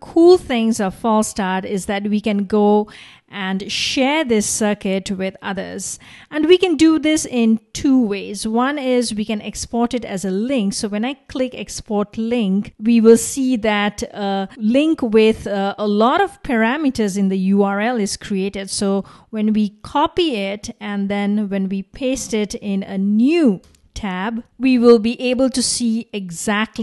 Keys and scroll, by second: 14.7 super+c, 22.0 super+v, 23.7 Return.